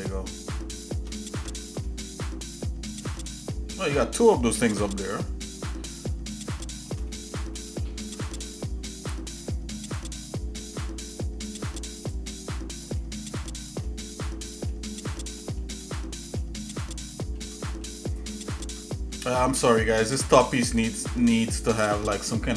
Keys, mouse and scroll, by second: 1.3 Tab, 1.9-3.1 shift+middle drag, 3.2 middle click, 4.0 shift+middle click, 4.9-5.2 scroll down 2, 5.4 middle click, 5.9-6.9 shift+middle drag, 7.1 middle click, 7.6 shift+middle click, 7.8 shift+middle click, 9.4 shift+middle click, 10.1-10.5 scroll up 2, 12.0 click, 13.0 middle click, 13.3 scroll down 1, 13.8 shift+middle click, 14.5 shift+middle click, 15.0 shift+middle click, 15.4 shift+middle click, 15.8 shift+middle click, 16.3 shift+middle click, 16.8 shift+middle click, 17.6 middle click, 18.2 click, 18.6 Tab, 19.3 shift+middle click, 19.9 scroll up 1, 20.7 click, 21.2-22.5 shift+middle drag.